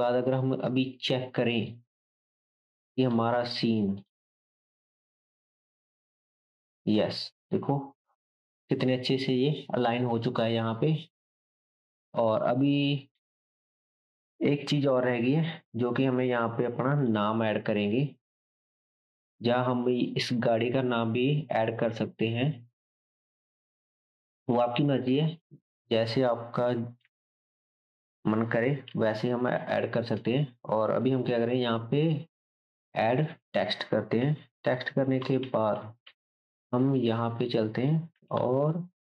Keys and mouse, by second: 1.6-4.8 middle drag, 2.7-25.5 drag, 4.8 space, 11.8 space, 17.0-39.1 shift+middle drag, 24.5 Tab, 25.7 Tab, 26.7 1, 27.1 shift+z, 27.5-34.7 drag, 28.9 shift+s, 30.4 Tab, 31.1 shift+a, 34.2 s, 35.2 g, 38.1 g.